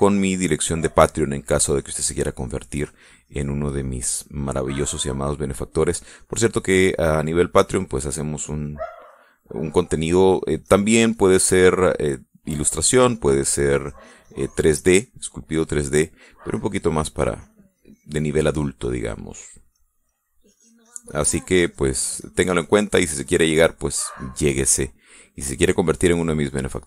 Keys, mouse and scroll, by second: 10.0-12.5 drag, 12.7 middle click, 13.3 middle click, 14.4-17.0 drag, 17.5-21.1 drag, 21.1 middle click, 21.9-23.0 drag, 26.6-26.8 drag.